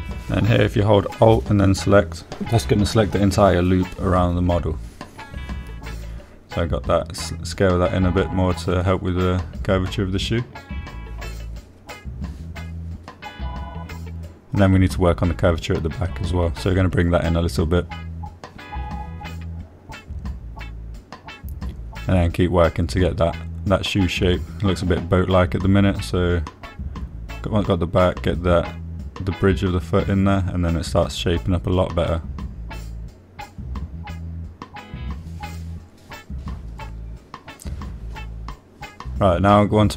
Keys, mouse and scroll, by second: 0.0 middle click, 0.1 click, 2.3 alt+click, 4.6-6.1 drag, 6.9 s, 7.2 x, 8.7 click, 8.9 click, 9.9-11.9 middle drag, 11.9 middle click, 12.6 shift+middle click, 13.1 middle click, 14.3 middle click, 15.7 click, 16.6 shift+click, 17.1 middle click, 17.7 s, 17.8 x, 20.2 click, 20.5 middle click, 22.1 click, 23.7 click, 24.6 shift+click, 25.5 s, 25.5 x, 28.4 click, 29.5 click, 30.4 s, 30.5 x, 34.0 click, 34.3-37.5 middle drag, 39.5 shift+middle click.